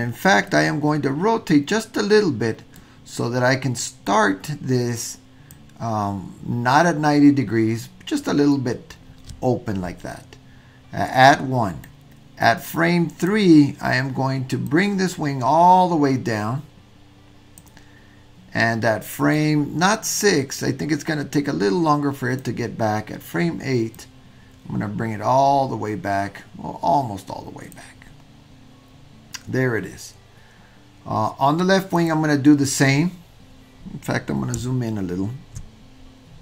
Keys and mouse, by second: 0.5 middle click, 1.9-2.8 middle drag, 4.1-5.6 drag, 12.0-13.3 drag, 14.7-17.7 drag, 19.4-22.5 drag, 24.1-27.8 drag, 32.0 click.